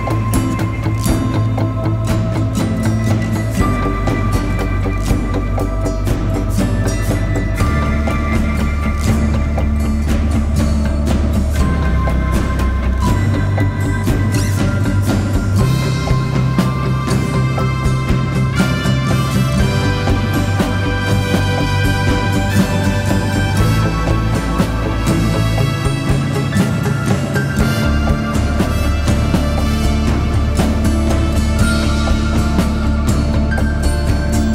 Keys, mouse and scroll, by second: 12.5-13.1 scroll down 1, 14.2 alt+click, 15.3 alt+click, 25.3-26.6 typing, 27.7-34.5 typing.